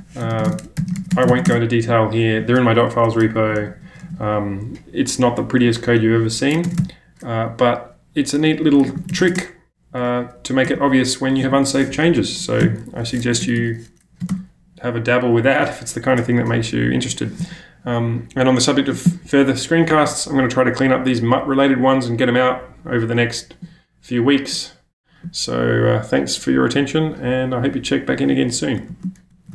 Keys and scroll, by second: 0.0-1.4 typing, 1.5 Return, 3.3-4.0 typing, 5.2 typing, 6.5 BackSpace, 6.6 ctrl+space, 6.8 h, 8.7-10.7 typing, 12.1 Escape, 12.3 Escape, 12.6 u, 13.2 Escape, 13.4 Escape, 13.6 Escape, 14.2 space, 15.4 typing, 29.3 shift+super+@.